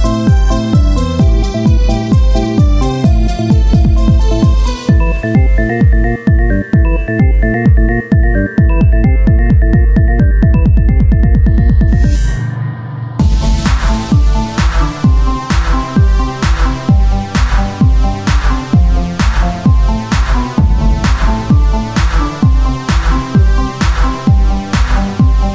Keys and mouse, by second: 1.1-8.0 drag, 8.0 Tab, 10.9 click, 11.4 z, 13.5 Tab, 13.9 Tab, 15.2 z, 15.5-17.2 drag, 16.8 right click, 17.2 z, 19.3-20.7 right drag, 20.1 click, 20.9 Tab, 23.7 KP_1, 24.6 click, 25.3 Tab.